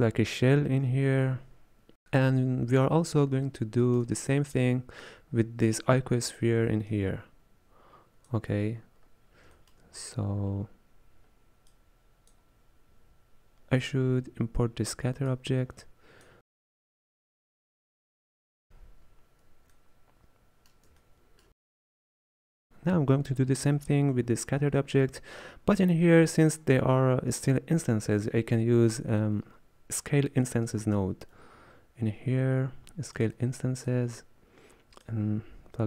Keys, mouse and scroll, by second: 1.5 scroll down 3, 2.3-3.5 scroll down 1, 3.5 shift+middle click, 4.4-4.8 scroll up 3, 5.1-8.8 drag, 8.8-9.6 scroll down 4, 9.6 shift+middle click, 10.1-10.5 scroll down 1, 10.5-11.7 scroll up 2, 11.7 click, 15.3 click, 16.6 middle drag, 16.8 click, 17.2 scroll down 2, 17.3-17.6 middle drag, 17.6-18.4 drag, 18.4 scroll up 1, 18.5 middle click, 18.7 x, 19.6 scroll down 1, 19.8-21.5 middle drag, 21.5 alt+a, 30.8 shift+a, 35.1 click.